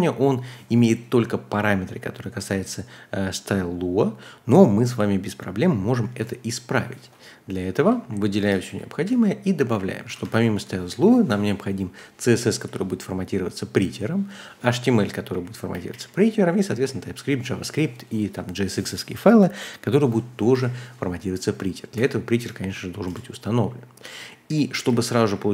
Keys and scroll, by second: 6.1 super+c, 7.7-12.9 typing, 10.0 Tab, 10.2 Tab, 14.5-17.2 typing, 20.4 typing, 21.9-25.5 typing.